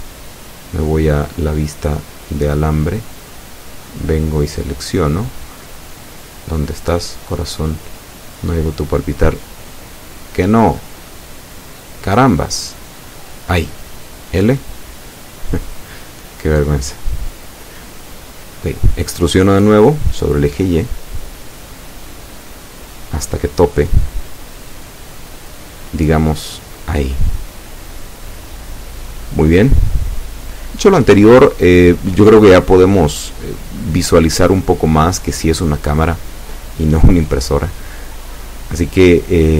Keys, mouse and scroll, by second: 0.4 e, 3.6-5.8 drag, 3.9-5.8 middle drag, 6.5-6.8 scroll up 2, 7.1 a, 9.0 z, 9.7-11.4 drag, 13.4 right click, 14.3 right click, 15.2 right click, 16.1 right click, 17.8 l, 18.7 l, 21.8 right click, 23.2 l, 25.3 z, 26.0-27.6 middle drag, 27.9-28.4 scroll up 2, 28.6-31.0 shift+middle drag, 31.5 e, 35.4 click, 37.2 ctrl+KP_1, 38.4-38.8 scroll down 2, 39.1 scroll down 2.